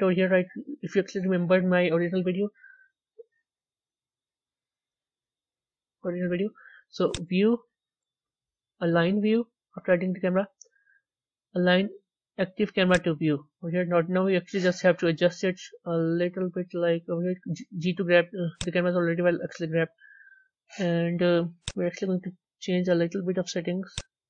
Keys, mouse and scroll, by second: 0.4-3.1 scroll up 1, 3.1-12.8 middle drag, 15.3 g.